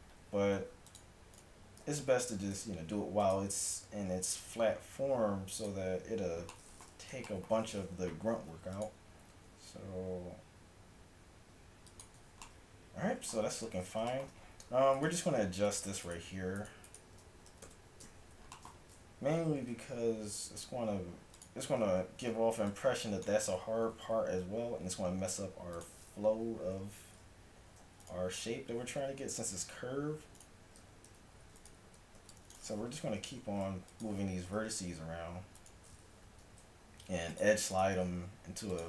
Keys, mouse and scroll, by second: 0.6 ctrl+r, 1.9 ctrl+z, 2.6 ctrl+r, 6.2 a, 8.4 ctrl+r, 13.5 a, 17.5 KP_1, 17.8 KP_7, 19.6 g, 21.7 a, 23.8 g, 27.4 c, 28.3 a, 28.5 c, 30.7 a, 30.9 c, 32.2 a, 32.2 c, 33.0 g, 34.8 a, 35.0 z, 36.1 g, 38.1 g.